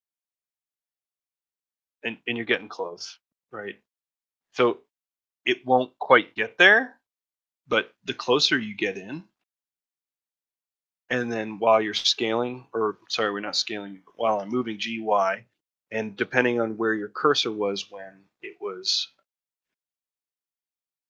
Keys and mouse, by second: 8.2 ctrl+middle click, 8.9 shift+middle click, 9.4 ctrl+middle click, 9.8 shift+middle click, 10.4 ctrl+middle click, 10.9 shift+middle click.